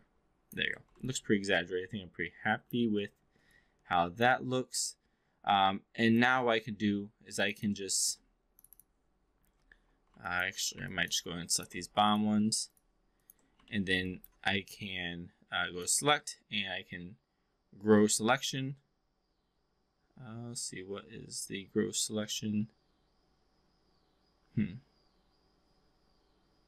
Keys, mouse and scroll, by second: 1.1-2.7 alt+drag, 2.9-3.3 alt+middle drag, 3.5-4.3 alt+drag, 4.9-6.2 alt+drag, 6.3 3, 7.3 click, 7.5 drag, 8.7 drag, 10.3 alt+drag, 10.9-11.2 alt+drag, 11.4 click, 11.9 shift+click, 13.7 alt+middle click, 14.0-14.3 alt+drag, 15.9-26.6 drag.